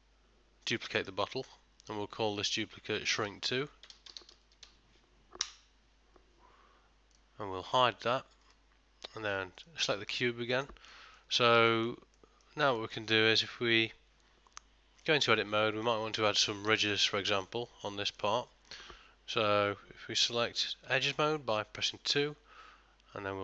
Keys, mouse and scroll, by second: 2.4 click, 7.2 click, 10.7 middle click, 11.2 ctrl+middle click, 11.8 shift+middle click, 12.2 middle click, 12.9 ctrl+middle click, 14.1 Tab, 15.1 middle click, 20.9 2.